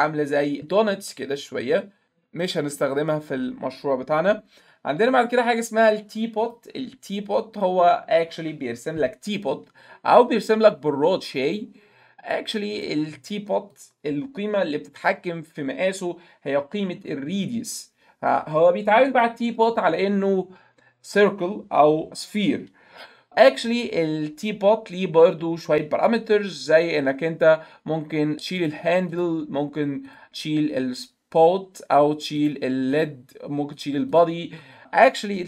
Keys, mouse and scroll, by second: 0.0 click, 2.4 right click, 6.4 click, 11.5 click, 12.7 right click, 13.7 click, 17.1-19.1 drag, 28.6 click, 29.1 click, 30.1 click, 32.4 click, 33.0 click, 33.8 click, 34.1 click.